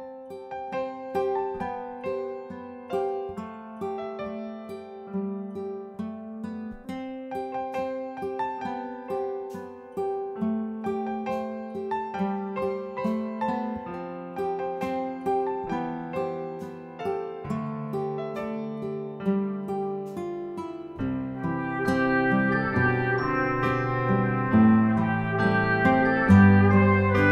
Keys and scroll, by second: 1.3 Escape, 3.2 Escape.